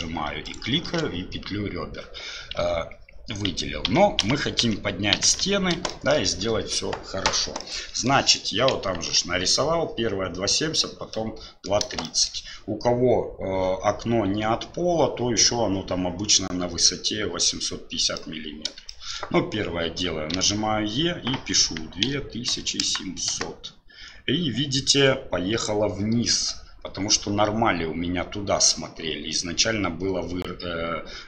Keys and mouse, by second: 3.5-5.4 ctrl+z, 5.9 shift+middle click, 7.6 middle click, 8.8 KP_1, 11.1 middle click, 12.1 shift+middle click, 18.2 middle click, 18.9 shift+middle click.